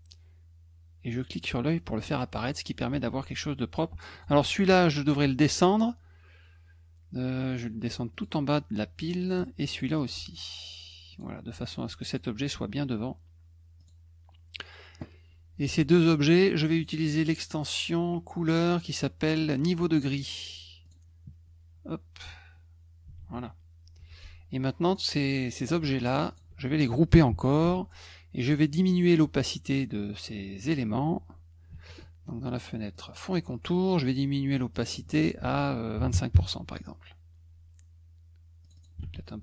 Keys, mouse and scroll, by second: 1.1 click, 1.8 middle click, 4.1 click, 5.2 F1, 8.1 click, 9.2 click, 9.4 F2, 9.7 click, 10.1 F1, 11.1 click, 12.1 click, 13.8 click, 15.7 shift+click, 16.7 click, 20.8 click, 23.2 ctrl+s, 24.8 click, 25.6 click, 26.0 shift+click, 26.3 shift+click, 27.6 ctrl+g, 32.9 click, 34.7 click, 34.8 click, 38.6 click, 38.7 click.